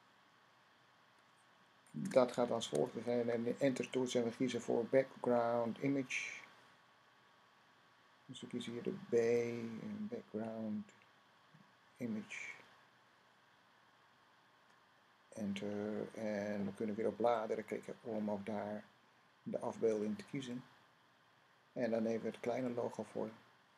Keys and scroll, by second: 2.4 shift+[, 4.6 Down, 9.1 Down, 9.1 b, 11.0 Down, 11.2 Down, 11.4 Down, 11.6 Down, 11.8 Down.